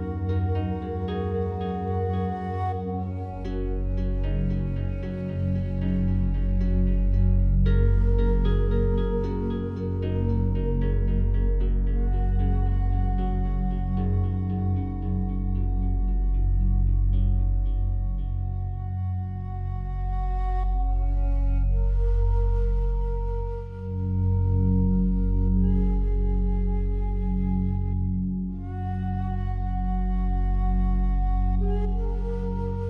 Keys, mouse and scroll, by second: 0.0-2.0 scroll up 2, 4.0-5.7 scroll up 1, 6.3-8.1 scroll up 1, 10.2 right click, 14.0 right click, 15.9 shift+right click, 16.8-18.3 alt+drag, 18.3 shift+right click, 18.9-21.8 alt+drag, 21.8 click, 24.0-25.1 typing, 25.8 Return, 27.4-32.8 drag.